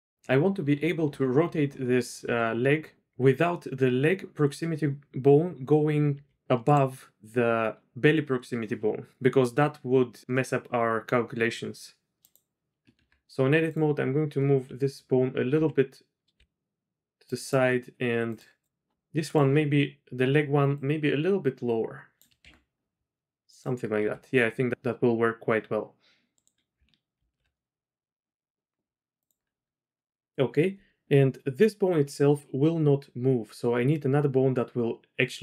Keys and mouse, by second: 2.2 r, 6.3 r, 12.2 click, 12.9 Tab, 13.6 click, 15.5 d, 16.4 g, 20.7-22.2 drag, 22.5 Tab, 23.5 click, 24.0 r, 27.1 alt+r, 29.2 click.